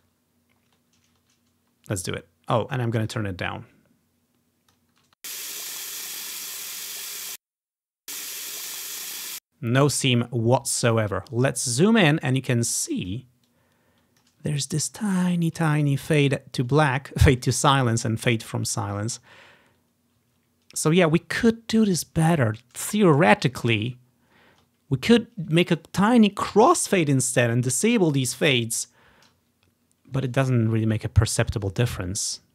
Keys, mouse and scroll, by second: 0.2 scroll up 1, 0.7-1.6 scroll down 1, 3.2-4.6 drag, 4.8-7.2 drag, 5.1 space, 7.3 space, 7.7-9.3 drag, 8.0 space, 9.3 space, 10.3-11.4 scroll up 1, 11.4-12.3 scroll up 1, 13.0 click, 14.3 ctrl+click, 14.6-15.0 ctrl+scroll down 1, 15.3 scroll up 1, 19.5 scroll down 1, 20.4 scroll up 1, 23.9 scroll up 1, 24.3 scroll down 1, 30.8 scroll up 2, 31.2-31.8 scroll down 2, 31.8-32.5 drag.